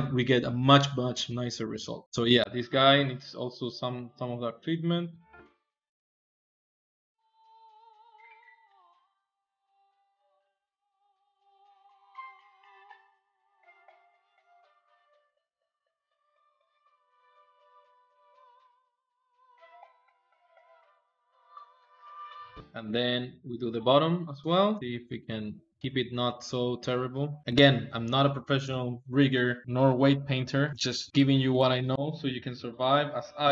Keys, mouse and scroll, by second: 3.8-5.2 drag, 5.7 ctrl+shift+click, 5.9 ctrl+shift+click, 6.1-7.2 drag, 7.2 middle click, 7.3 click, 7.6 middle click, 7.7 click, 7.9 middle click, 8.2 click, 9.0 middle click, 9.4 click, 9.6 shift+middle click, 9.8 ctrl+click, 9.9 middle click, 10.2 shift+click, 10.4 click, 10.6 ctrl+middle click, 11.2 ctrl+Tab, 11.3 ctrl+middle click, 11.6 ctrl+Tab, 11.9-13.0 middle drag, 13.2 middle click, 13.3 ctrl+Tab, 13.5 shift+middle click, 14.2 Tab, 14.4 Tab, 14.6 ctrl+middle click, 14.9 ctrl+click, 15.0 middle click, 15.5 click, 16.2-17.7 drag, 17.7 ctrl+z, 17.9 click, 18.8 middle click, 19.0 ctrl+z, 19.3 ctrl+z, 19.5 ctrl+z, 19.7 click, 20.4 click, 20.9 ctrl+middle click, 21.9 ctrl+middle click, 22.0 ctrl+Tab, 22.2 ctrl+middle click, 22.4 alt+shift+z, 22.4 KP_1, 22.5-25.7 ctrl+middle drag, 25.7 ctrl+Tab, 25.8-27.2 middle drag, 27.3 click, 28.5 n, 29.2-30.8 middle drag, 30.8 KP_1, 31.1 ctrl+Tab, 32.2 alt+shift+z, 32.5 click, 33.3 click.